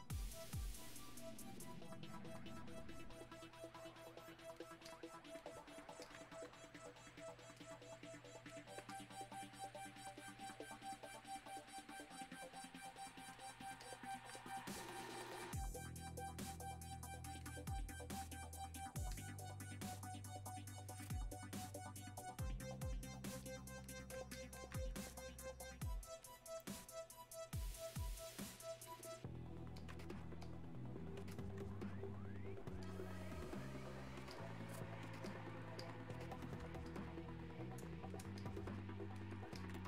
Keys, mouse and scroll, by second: 1.1 click, 11.9 click, 18.8 right click, 19.0 right click, 19.2 click, 24.2 click, 29.0 click, 32.9 click.